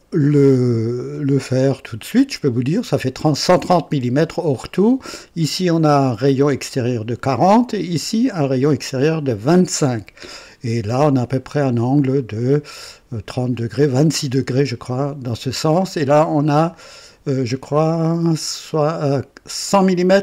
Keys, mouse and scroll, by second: 1.1-2.3 drag, 4.5-5.2 drag, 7.3-7.9 drag, 10.0-11.4 drag, 11.5 click, 12.7-13.4 drag, 14.9-15.7 drag.